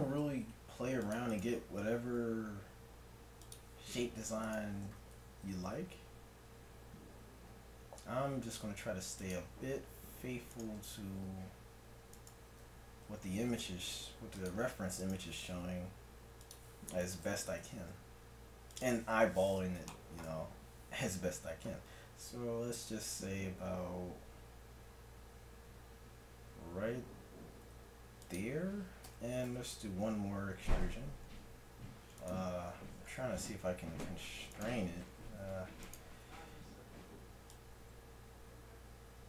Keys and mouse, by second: 0.5 g, 2.1 r, 3.0 click, 4.5-6.2 drag, 5.5 g, 10.5 click, 11.1-12.3 right drag, 11.1 g, 13.3 g, 15.0 right click, 15.6 r, 17.1-18.9 right drag, 17.6 g, 19.9 middle click, 21.1 e, 29.1 e, 33.4 g, 35.4 g, 37.6 click.